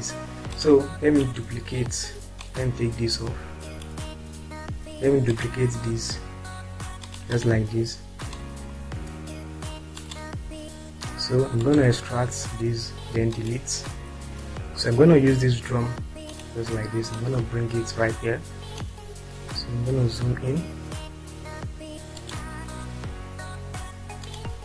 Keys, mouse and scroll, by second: 2.8-3.8 drag, 3.9-5.2 drag, 8.8 ctrl+click, 15.0 Delete, 16.3 click, 17.2-18.8 drag, 20.0-20.6 scroll up 2, 22.1 click.